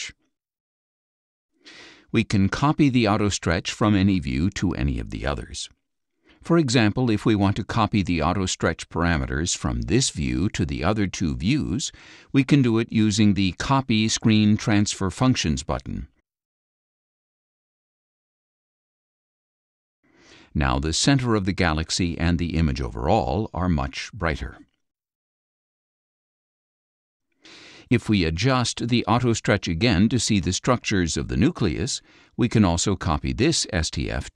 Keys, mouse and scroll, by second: 0.0 click, 1.2 click, 17.6 click, 21.1 click, 22.5 click, 25.0 click, 27.3 ctrl+click, 30.1-31.3 drag, 32.1-32.7 drag, 33.1 click.